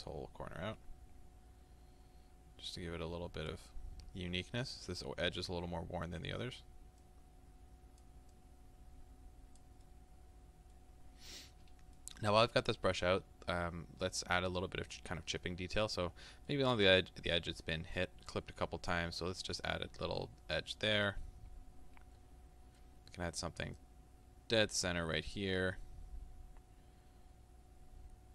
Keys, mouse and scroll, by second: 3.7-7.0 middle drag, 7.0-9.9 drag, 9.9-19.0 middle drag, 15.7-16.1 scroll down 2, 16.1-16.7 scroll up 2, 19.0-21.0 drag, 21.0-23.8 middle drag, 23.8-25.2 drag, 25.0 scroll down 2, 25.2-28.3 middle drag.